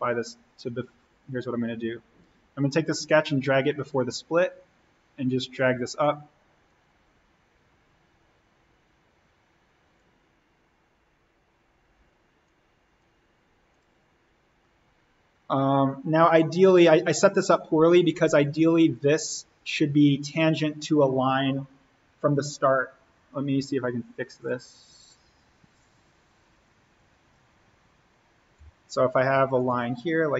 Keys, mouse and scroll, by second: 12.4 click, 14.0-14.4 scroll up 1, 15.1-15.6 scroll up 1, 15.6-17.7 scroll down 1, 17.8 click, 18.4 scroll up 1, 19.2 click, 19.7-20.6 scroll up 1, 23.2 right click, 24.4 click, 25.4-26.0 scroll down 1, 28.5 l, 29.5 click.